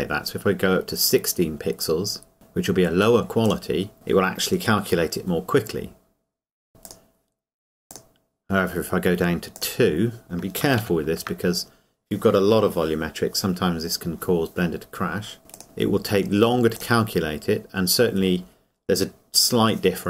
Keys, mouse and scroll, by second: 3.5 click, 6.9 click, 11.3 ctrl+s, 15.5 click.